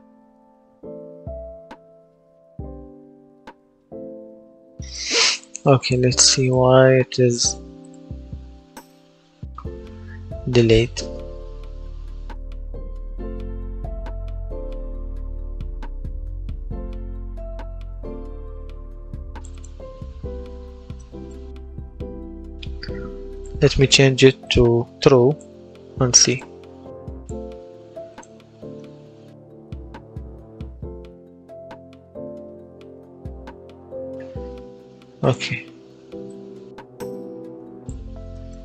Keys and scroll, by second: 1.1 space, 3.0 Escape, 28.2 w, 28.6 space, 30.4 space, 31.9 space, 33.6 Escape.